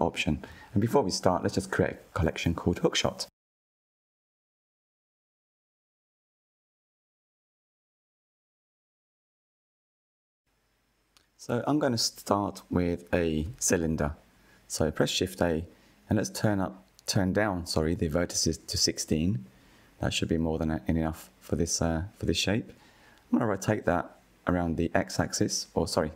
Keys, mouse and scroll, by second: 0.1-2.1 right drag, 2.1 click, 2.3-3.9 drag, 3.9 shift+o, 7.3-7.7 scroll up 1, 7.7-8.4 shift+middle drag, 8.4-8.8 scroll up 3, 8.9-10.7 shift+middle drag, 10.7 shift+a, 14.4-18.2 drag, 18.2-18.7 scroll down 3, 18.7-20.2 shift+middle drag, 20.2 click, 23.5-26.1 drag.